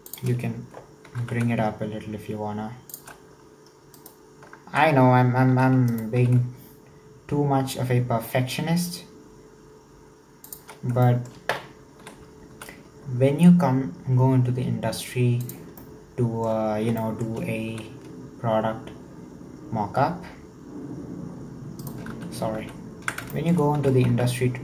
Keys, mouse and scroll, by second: 1.1 g, 4.0 alt+right click, 5.5 e, 11.1 shift+middle click, 12.0 e, 15.8-16.8 shift+middle drag, 16.8 scroll down 2, 17.1 shift+middle click, 17.7 e, 22.2 ctrl+z, 22.6 ctrl+z, 23.4-23.8 shift+middle drag, 23.8 s.